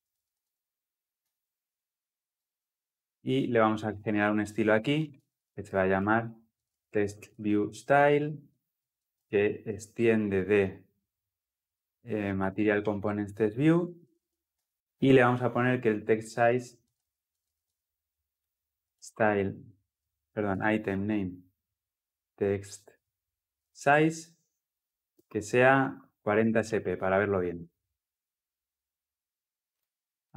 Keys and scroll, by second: 1.1 Return, 6.0 Return, 21.1 Return.